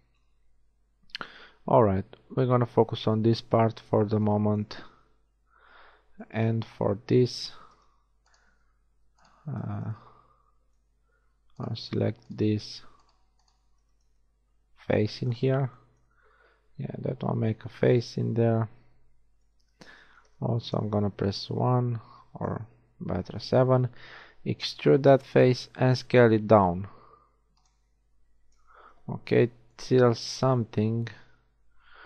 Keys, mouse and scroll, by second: 7.6 z, 14.4 middle click, 17.6 f, 19.4 KP_1, 20.1 z, 22.5 KP_7, 24.9 e, 26.1 s, 28.6 KP_1, 30.4 s.